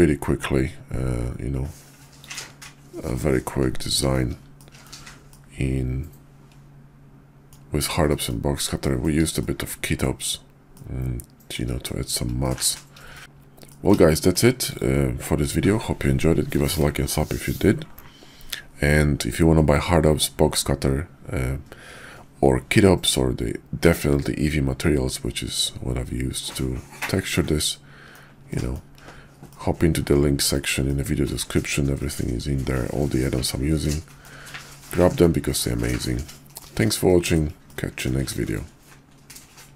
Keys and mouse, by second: 2.2 middle click, 3.0-4.1 middle drag, 4.5-4.9 shift+middle drag, 5.3-7.5 middle drag, 8.0 middle drag, 8.8 shift+middle drag, 9.4-10.0 middle drag, 10.7-11.5 middle drag, 11.8 shift+middle drag, 12.4-12.7 middle drag, 13.0 shift+click, 13.2 q, 13.7 drag, 14.1 shift+drag, 14.7 click, 23.7-26.5 middle drag, 27.4-28.1 middle drag, 28.4 shift+middle drag, 29.4-30.5 middle drag, 30.8-31.3 shift+middle drag, 31.9-34.2 middle drag, 34.9 shift+middle drag, 35.5-36.6 middle drag, 37.0-37.3 shift+middle drag, 37.6-38.1 middle drag.